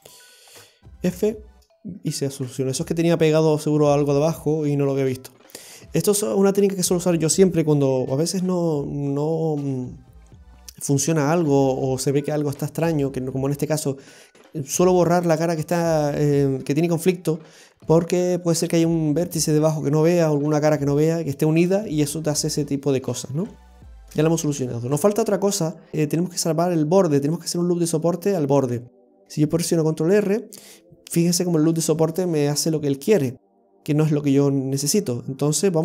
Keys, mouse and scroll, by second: 0.4 alt+shift+right click, 1.1 f, 1.7 scroll up 1, 2.0-2.5 scroll down 2, 2.5 right click, 4.1 middle click, 23.3-23.8 scroll down 4, 23.9 shift+middle click, 24.3-25.9 scroll up 1, 25.9 scroll down 1, 29.7 ctrl+r.